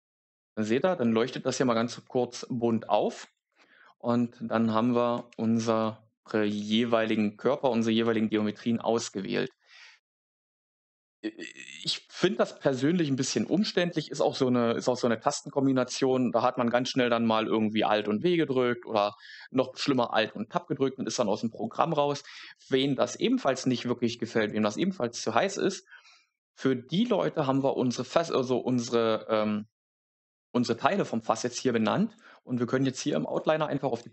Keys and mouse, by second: 3.3 alt+q, 5.2 alt+q, 6.7 alt+q, 7.6 alt+q, 8.0 middle click, 33.2 click, 33.9 click.